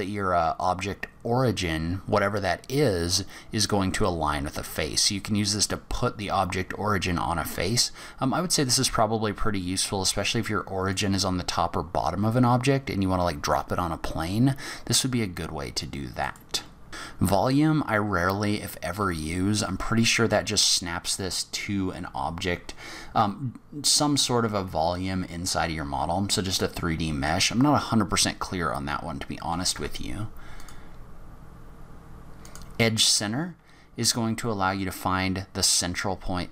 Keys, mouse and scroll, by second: 16.2 click, 30.5 click, 33.9 g.